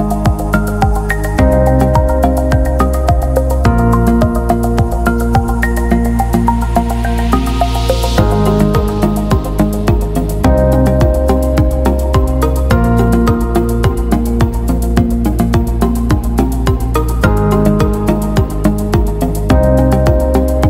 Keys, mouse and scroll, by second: 1.1 right click, 2.6 click, 2.9 click, 5.3 click, 6.5 click, 9.9 click, 15.5 click, 16.9 scroll up 1.